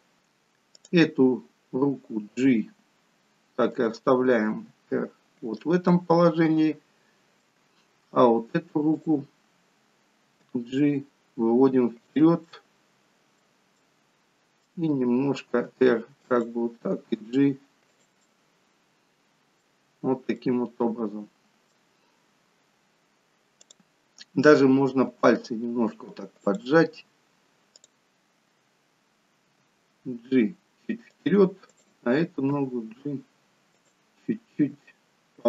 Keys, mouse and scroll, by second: 1.1 click, 2.4 g, 4.7 r, 5.9 middle click, 7.7-8.1 scroll up 2, 8.9 click, 10.5 g, 12.4 middle click, 14.4 middle click, 15.6 r, 16.9 g, 18.3 middle click, 19.9-20.8 scroll down 3, 20.4 middle click, 22.2-23.0 scroll up 1, 23.0-23.4 scroll up 1, 23.6 click, 25.1 r, 27.8 click, 29.5 g, 31.8 click, 32.5 g, 34.6 r.